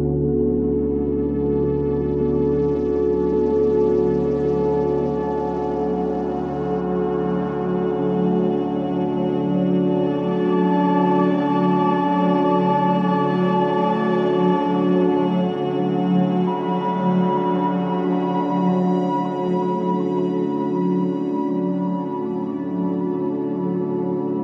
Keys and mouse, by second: 6.5-8.5 drag, 7.5 g, 9.7-11.7 drag, 9.9 g, 13.1-17.5 drag, 15.9 shift+a, 21.1 middle click, 22.0 g, 23.4-24.4 drag.